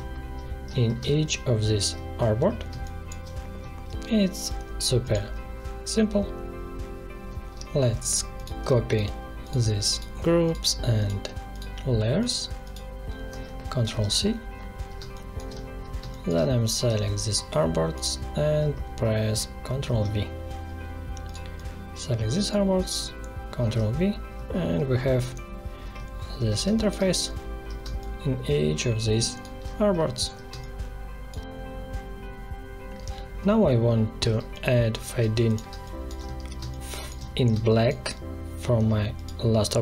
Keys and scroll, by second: 0.9 space, 2.6 space, 13.7 ctrl+c, 14.9 space, 19.8 ctrl+v, 23.6 ctrl+v, 26.6 space, 34.3 space.